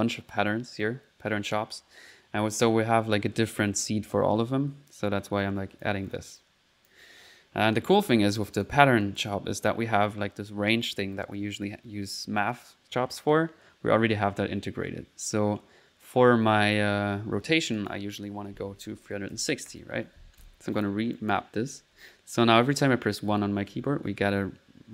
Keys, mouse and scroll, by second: 5.1-6.2 drag, 6.4 click, 8.5 click, 9.0 click, 17.8 click, 18.1 click, 20.8-21.8 drag, 21.5-23.7 typing, 23.8 middle click.